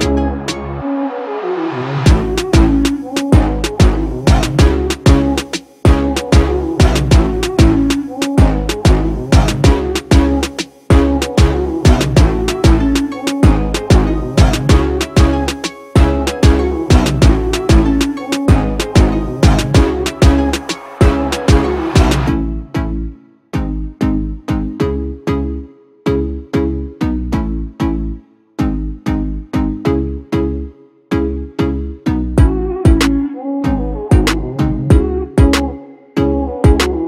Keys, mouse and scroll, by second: 7.3 shift+click, 11.7 ctrl+c, 13.0 ctrl+f, 14.8 right click, 26.3 Left, 26.5 Left, 26.7 Left, 27.0 Left.